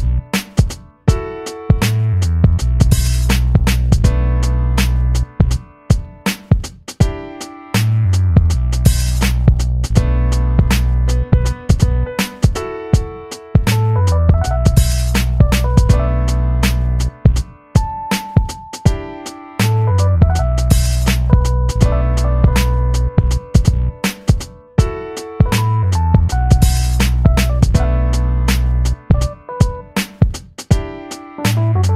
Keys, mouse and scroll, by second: 0.3-4.9 drag, 4.9-6.4 alt+shift+drag, 8.7 middle click, 9.8 i, 11.2-14.3 drag, 14.3-16.5 drag, 16.5 v, 16.9-18.2 drag, 18.2 space, 18.3 click, 18.6 space, 27.4-31.9 shift+drag.